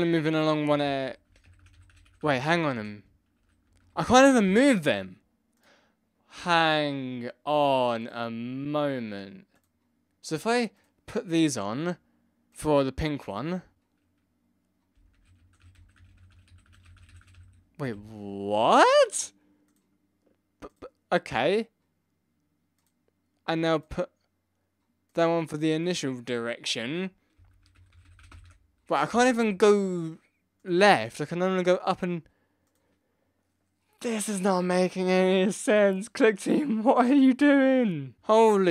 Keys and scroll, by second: 0.0 Left, 0.6 Up, 0.8 Left, 1.0 Down, 1.2 Left, 1.4 Down, 1.6 Left, 1.9 Left, 2.0 Right, 2.2 Left, 2.3 Down, 2.7 Left, 3.3 Up, 3.4 Right, 3.6 Left, 3.9 Down, 4.1 Left, 4.3 Up, 14.9 Down, 14.9 Right, 15.1 Left, 15.3 Up, 15.5 Right, 15.6 Left, 15.7 Down, 15.9 Left, 16.1 Right, 16.2 Up, 16.3 Left, 16.4 Down, 16.6 Left, 16.7 Right, 17.0 Left, 17.0 Down, 17.1 Right, 17.3 Left, 17.9 Up, 27.4 Down, 27.5 Left, 27.8 Up, 27.8 Right, 28.0 Left, 28.0 Down, 28.1 Left, 28.3 Up, 29.1 Left, 29.2 Left, 29.4 Left, 38.1 Right.